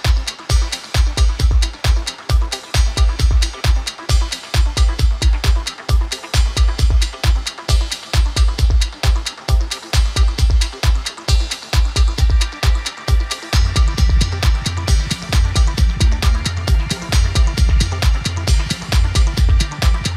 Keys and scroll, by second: 18.5 typing.